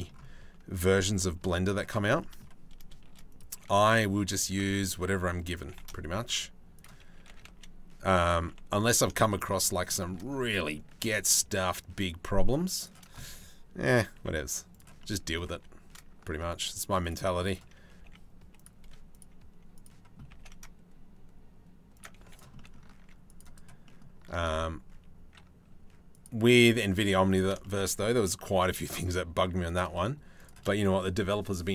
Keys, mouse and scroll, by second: 1.8 middle click, 2.7 shift+d, 3.3 s, 4.1 s, 5.2 g, 6.9 s, 7.9 g, 8.8 shift+middle click, 8.9 middle click, 9.5 shift+middle click, 10.1 middle click, 10.5 e, 13.7 e, 14.6 click, 15.1 3, 15.8 ctrl+r, 16.8 3, 17.5 g, 18.4 2, 19.3 click, 19.9 g, 21.8 3, 21.9 click, 22.1 middle click, 22.6 ctrl+r, 24.0 ctrl+b, 26.1 2, 26.7 3, 28.1 i, 29.5 e.